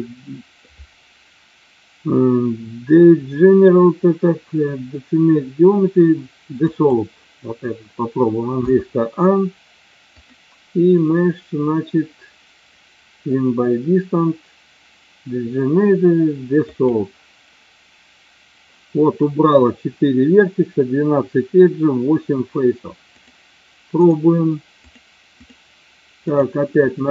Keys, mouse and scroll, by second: 8.6 a, 10.2 click, 23.2-24.0 drag, 24.8-25.6 drag, 26.9 shift+click.